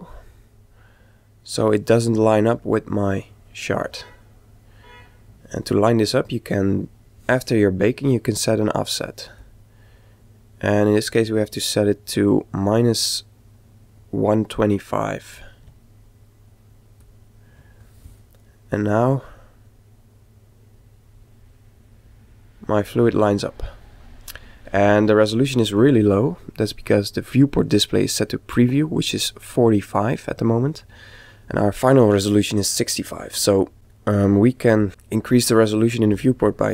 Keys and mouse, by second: 8.9 click, 18.7 click, 33.7-35.7 drag, 36.1 click.